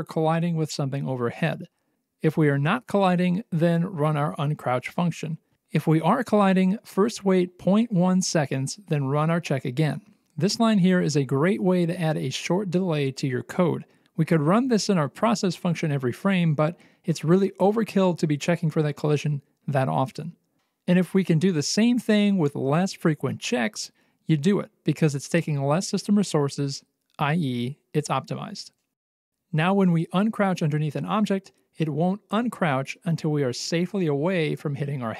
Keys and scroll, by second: 0.1 BackSpace, 26.1 alt+x, 29.5 w, 31.6-35.1 typing.